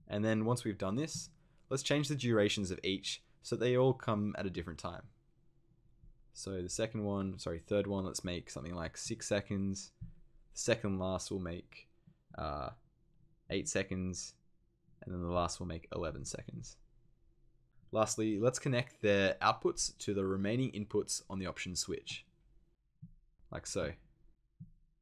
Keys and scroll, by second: 8.9 6, 13.3 8, 15.9 1.